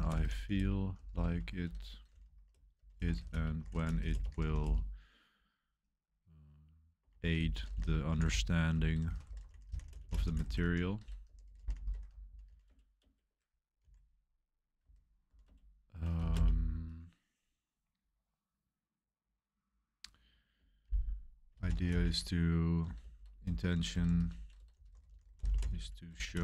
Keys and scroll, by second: 0.0-5.1 typing, 6.7-16.8 typing, 21.3-26.4 typing.